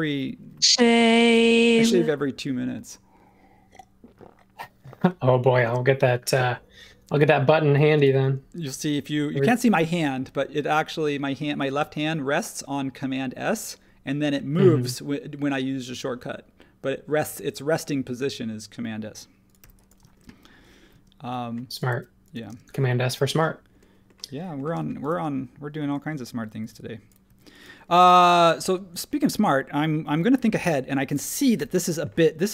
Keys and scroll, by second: 7.9 space, 19.6 h, 20.9-22.5 typing, 23.2 super+z, 24.7 space, 25.8 super+z, 26.6 r, 27.2 e, 30.0 super+1, 31.5 l.